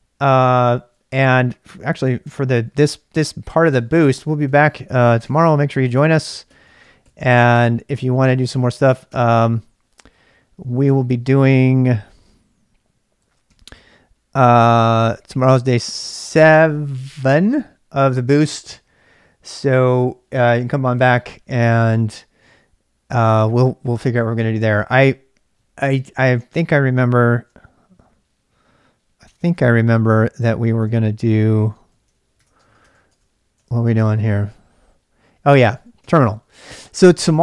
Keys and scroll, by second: 2.2 ctrl+[, 2.5-8.1 typing, 9.2 k, 10.1 j, 10.8 Return, 13.2 ctrl+b, 13.4 n, 27.3 ctrl+a, 29.4 ctrl+b, 29.6 n, 30.8 ctrl+c, 31.2-34.1 typing, 32.8 Tab, 33.1 Return, 35.3-36.9 typing.